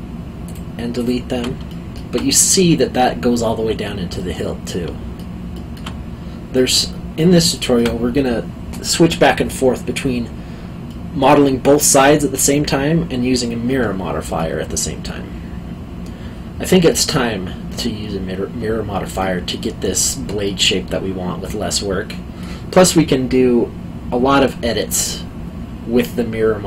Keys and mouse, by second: 0.5 alt+shift+click, 1.7 alt+middle click, 4.8 alt+middle click, 6.5 middle click, 10.9 middle click, 16.9 middle click, 20.4 middle click.